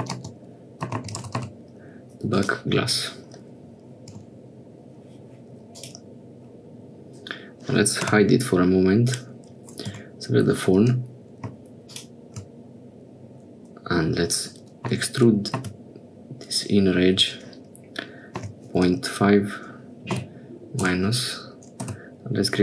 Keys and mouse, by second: 1.4 s, 4.7 Tab, 5.8 click, 8.1 h, 9.1 click, 10.0 Tab, 10.9 2, 15.1 e, 22.0 f.